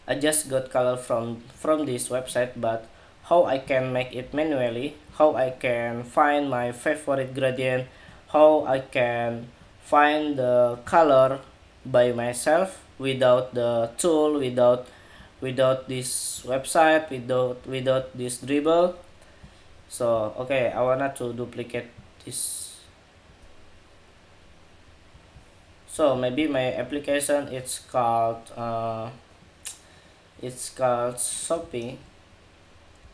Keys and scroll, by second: 26.6 super+a.